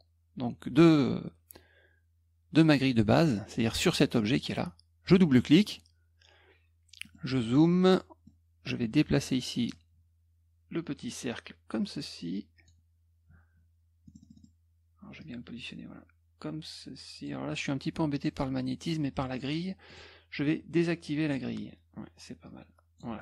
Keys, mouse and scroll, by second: 3.9 click, 4.3 click, 5.5 click, 5.6 click, 7.0 middle click, 7.6 middle click, 7.9 middle click, 9.7-12.6 drag, 14.0 middle click, 14.0-14.4 scroll up 3, 14.2 middle click, 14.3 middle click, 15.2-17.2 drag, 19.8 click, 21.2 click, 22.4 click.